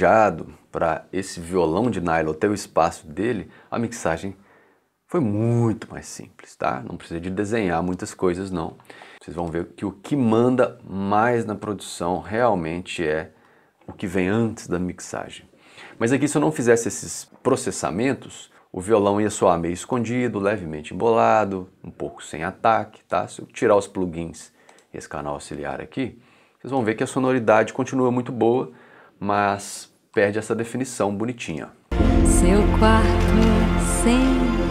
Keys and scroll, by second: 31.5 space.